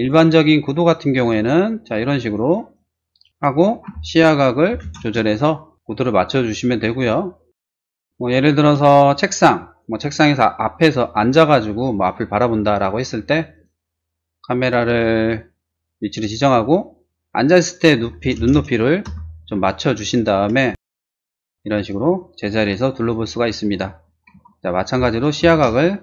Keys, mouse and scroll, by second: 0.0 shift+click, 1.1 click, 2.2 middle click, 2.4 click, 2.7 click, 3.2 click, 3.7-4.8 typing, 5.0 Return, 7.5 middle click, 7.9 shift+middle click, 8.9 shift+middle click, 11.3 middle click, 18.0-18.6 typing, 19.1 Return, 20.7 typing, 20.9 Return, 21.7 click, 21.7-22.8 middle drag, 22.9 middle click, 23.0 click, 23.5 click, 23.9 click, 24.3 z, 25.4 typing, 25.7 Return.